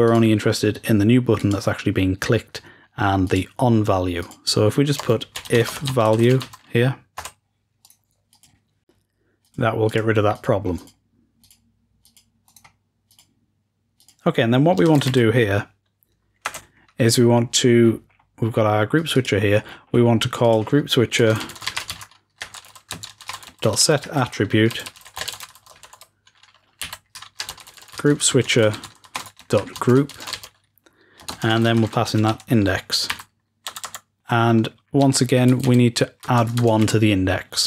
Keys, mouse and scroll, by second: 4.4-5.5 drag, 7.7 click, 7.8 right click, 9.3-10.4 drag, 10.7-11.3 drag, 11.4-12.0 drag, 12.1 click, 12.5-13.8 drag, 13.9 click, 14.7 shift+click, 14.7 shift+Home, 17.7-18.9 scroll up 3, 18.9 click, 19.6-20.3 scroll down 2, 19.9-21.7 drag, 20.4-21.7 scroll down 2, 34.0 click.